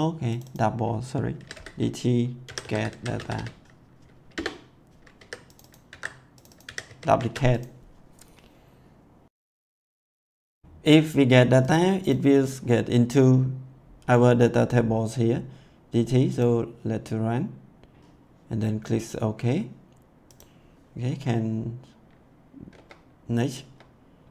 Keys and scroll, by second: 1.1-5.1 typing, 5.9 ctrl+c, 6.6 ctrl+v, 6.8 ctrl+s, 22.6 F10.